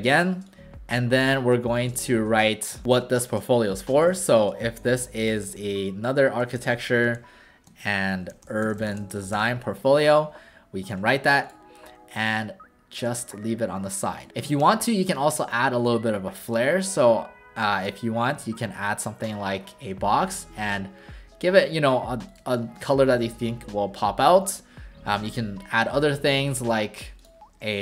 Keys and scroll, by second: 2.8 ctrl+a, 3.7-10.0 typing, 14.6 w, 18.3 v, 23.1 w.